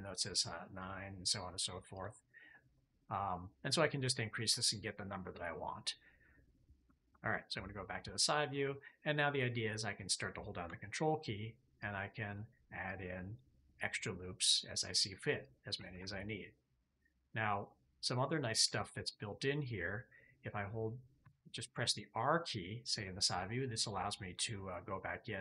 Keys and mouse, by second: 0.7 click, 1.8 click, 2.4-6.2 drag, 7.0 KP_3, 11.7 ctrl+click, 18.6 shift+middle click, 21.1 r.